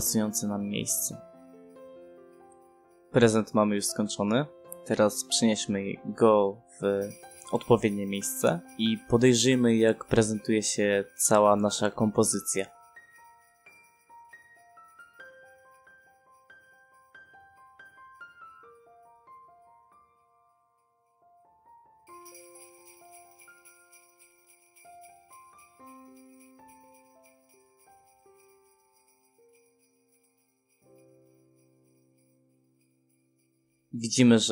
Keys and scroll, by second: 0.6 space, 6.3 space, 6.5 f, 9.7 Escape, 10.6 f, 10.8 space, 11.1 e, 11.2 space, 19.0 ctrl+p.